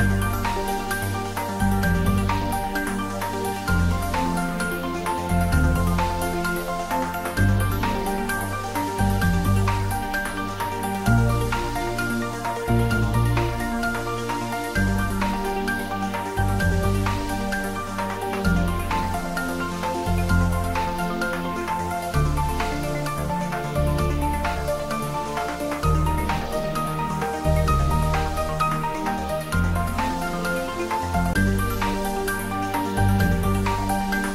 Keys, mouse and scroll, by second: 0.2 shift+z, 0.9 click, 1.3-1.8 scroll down 1, 1.8-2.4 middle click, 2.5 scroll up 1, 3.1 click, 3.9-4.8 typing, 6.4-7.1 typing, 7.0-9.8 middle drag, 9.5 click, 10.1-10.4 scroll up 1, 10.4 middle click, 11.1 click, 12.0 g, 12.4 x, 13.6 click, 14.0-15.9 middle drag, 15.8-16.4 scroll up 1, 16.4 middle click, 16.5 scroll up 1, 17.0 Tab, 17.4 scroll up 1, 18.9 Tab, 19.5 shift+click, 22.3 Tab, 22.9 scroll up 1, 23.3-23.9 middle drag, 28.0 click, 31.6 f, 33.0-33.6 middle drag.